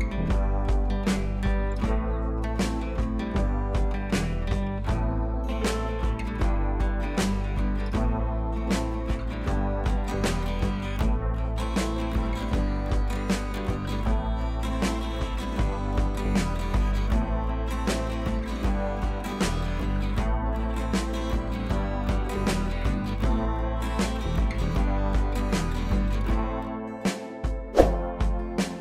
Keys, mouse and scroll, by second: 5.5 ctrl+z, 6.9-7.6 drag.